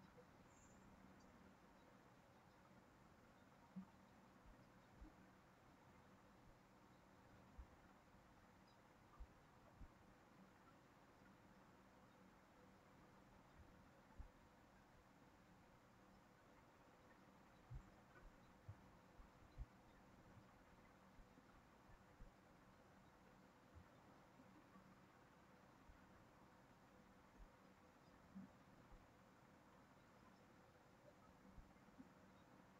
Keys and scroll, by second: 23.2 ctrl+z, 29.3 ctrl+z.